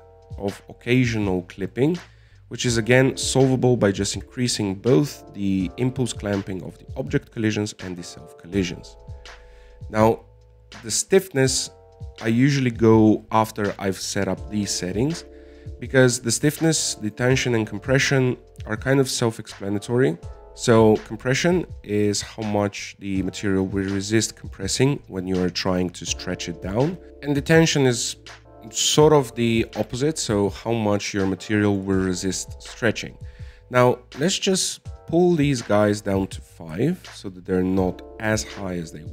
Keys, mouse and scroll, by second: 0.3 alt+a, 0.4 scroll down 2, 0.6-3.6 middle drag, 3.6-4.5 scroll up 1, 4.5-7.6 drag, 9.3-12.2 scroll up 20, 17.6 click, 32.5-34.7 middle drag, 34.7 click, 35.5-39.1 drag.